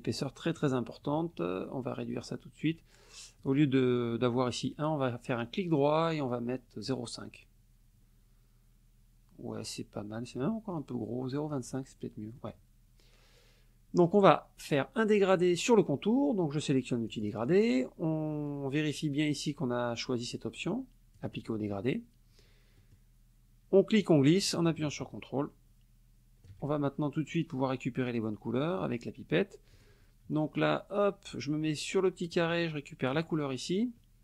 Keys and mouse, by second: 2.2 right click, 3.4 click, 4.6 right click, 6.9 click, 10.7 right click, 11.5 click, 12.4 middle click, 17.1 click, 20.6 click, 22.8 middle click, 24.0-26.7 drag, 29.7 click, 32.3 click, 33.1 click.